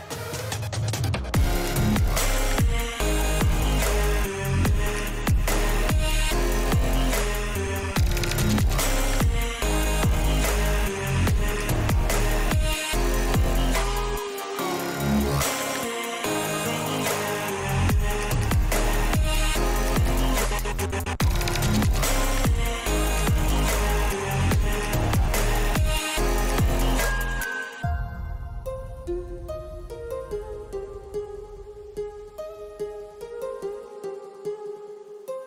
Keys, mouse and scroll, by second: 0.5 alt+h, 2.4 shift+middle click, 3.1 click, 8.4 ctrl+z, 8.7 ctrl+z, 9.0 ctrl+z, 10.8 ctrl+z, 13.5 shift+middle click, 14.6 ctrl+shift+click, 16.1 alt+h, 22.6 click, 23.3 click, 23.9 click, 25.1 click, 27.1 Tab, 27.6 shift+middle click, 30.2 middle click.